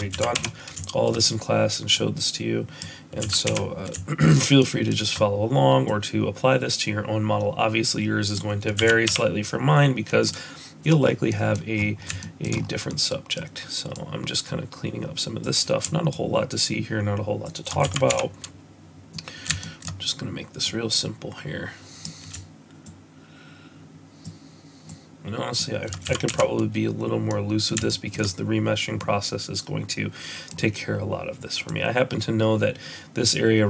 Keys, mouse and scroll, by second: 0.1 x, 1.9 click, 3.2 x, 4.6 shift+middle click, 5.8 click, 8.7 x, 10.2 middle click, 11.0 scroll down 2, 11.2 middle click, 11.7-12.0 scroll down 4, 12.1 shift+middle click, 12.5 scroll up 3, 12.8 middle click, 13.9 click, 16.1 shift+click, 17.8 x, 19.1 middle click, 19.5 shift+middle click, 20.6 click, 22.8 shift+click, 24.8 shift+click, 26.0 x, 27.2 middle click, 27.8 shift+middle click, 28.9 middle click, 31.6 click.